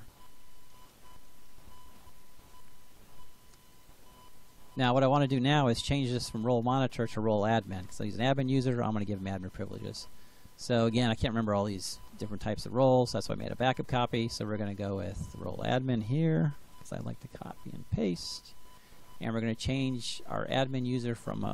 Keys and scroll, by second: 16.4 ctrl+c.